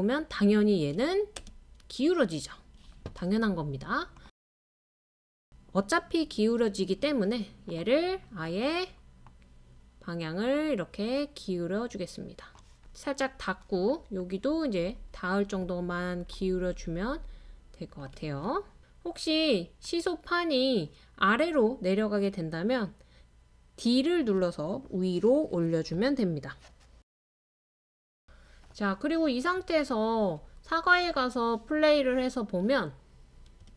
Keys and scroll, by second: 0.2 typing, 4.5 typing, 7.9-8.6 typing, 14.5-17.3 typing, 21.8-22.5 typing, 24.6-26.4 typing, 27.7-29.9 typing, 31.4-32.1 typing, 33.4-33.7 typing.